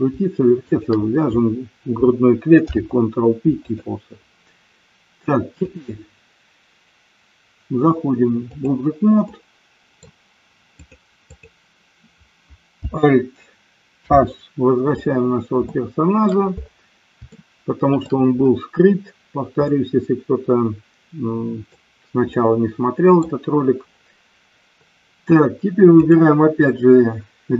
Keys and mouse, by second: 0.6 shift+click, 2.6 ctrl+p, 5.7-8.6 drag, 9.3 middle click, 10.8 click, 13.9 alt+h, 15.7-16.3 shift+middle drag, 17.3-18.2 shift+middle drag, 19.7-21.7 middle drag, 22.3-23.4 middle drag, 25.9 click.